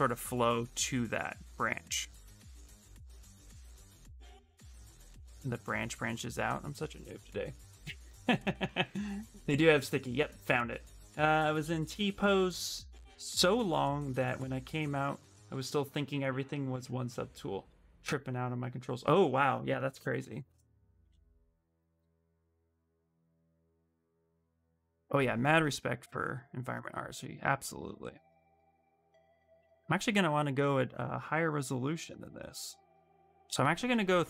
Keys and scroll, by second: 30.3 2.